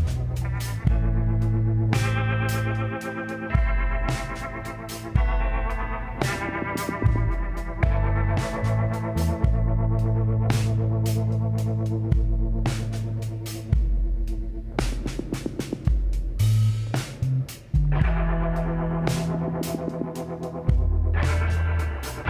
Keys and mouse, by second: 0.8 click, 3.3 e, 5.6 z, 8.8 s, 12.2 KP_7, 13.2 z, 19.0 s.